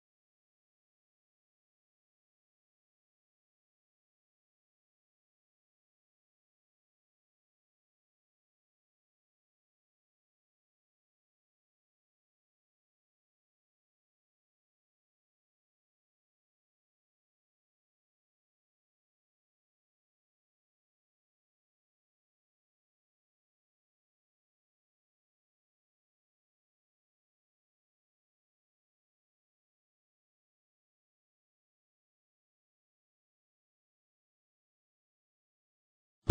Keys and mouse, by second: 0.2 ctrl+r, 2.7 shift+middle click, 3.6 g, 5.4 g, 6.8 click, 7.3 shift+click, 7.8 2, 8.4 ctrl+r, 10.4 click, 11.0 shift+click, 11.4 2, 11.9 ctrl+r, 13.4 click, 14.0 shift+click, 14.4 2, 15.0 ctrl+r, 16.6 click, 17.2 click, 17.8 shift+click, 18.9 shift+click, 19.3 typing, 19.8-21.1 shift+middle drag, 21.1 click, 22.7-26.4 middle drag, 26.4 ctrl+r, 28.0 click, 28.6 shift+click, 29.1 2, 29.8-32.9 middle drag, 35.1-36.3 middle drag.